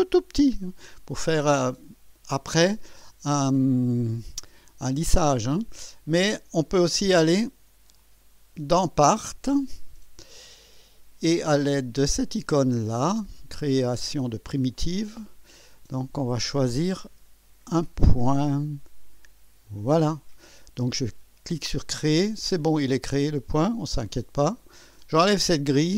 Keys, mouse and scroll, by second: 4.6-6.4 drag, 7.9 click, 9.2 click, 14.7 click, 16.3 click, 19.6 click, 21.7 click, 23.3 click, 24.0-24.8 drag.